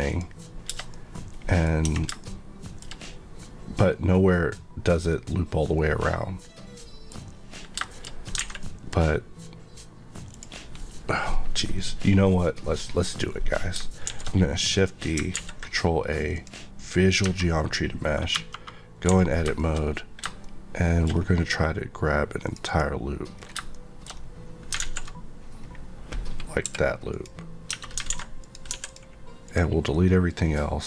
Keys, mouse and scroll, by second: 0.0 click, 0.9 middle click, 1.8 Tab, 2.2 shift+middle click, 7.8 shift+middle click, 8.4 alt+a, 8.5 middle click, 9.1 middle click, 10.3 click, 14.0 shift+d, 14.7 right click, 15.3 ctrl+a, 16.3 click, 17.2 Tab, 18.3 KP_Divide, 19.0 a, 19.6 shift+middle click, 19.7-20.4 scroll up 2, 20.4 shift+middle click, 21.0 scroll, 21.0 scroll down 1, 22.4 click, 23.3 scroll down 1, 23.7 middle click, 24.1 scroll up 1, 24.8 alt+z, 25.6-26.6 scroll down 1, 26.6 p, 27.1 click, 27.6 Tab, 28.1 alt+a, 28.4 click, 28.7 x, 28.8 click, 29.4 click, 29.9 middle click.